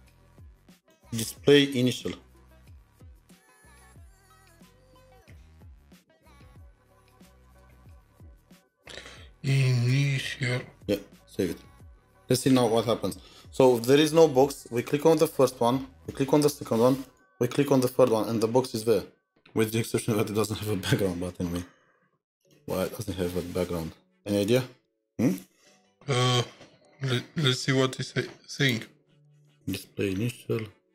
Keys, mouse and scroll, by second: 2.0-3.1 typing, 4.5-10.7 typing, 11.9 typing, 13.8-14.4 scroll down 2, 14.4 typing, 17.8-19.3 scroll down 4, 21.0 scroll down 5, 21.3-23.3 scroll up 1, 29.9 scroll up 1, 29.9-30.6 scroll down 1, 30.6-30.9 scroll down 2.